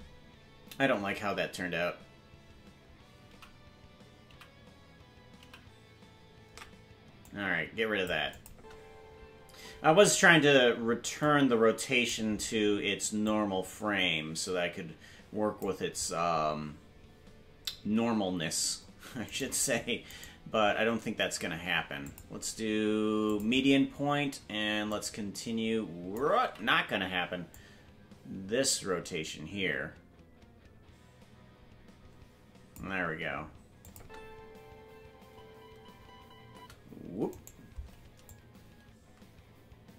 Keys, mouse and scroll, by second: 7.2 ctrl+z, 7.2 click, 8.3 click, 8.5 space, 11.2 click, 13.2-15.6 drag, 16.7-17.2 scroll down 1, 17.2-18.1 scroll down 1, 18.1 scroll down 1, 19.3 right click, 19.3-20.2 scroll down 1, 20.2 shift+right click, 22.0-23.4 drag, 24.9-26.2 drag, 26.9 ctrl+z, 27.5-32.7 drag, 33.8-35.9 drag, 33.9 space, 37.3-38.3 right drag, 37.3 space, 38.3-39.9 drag.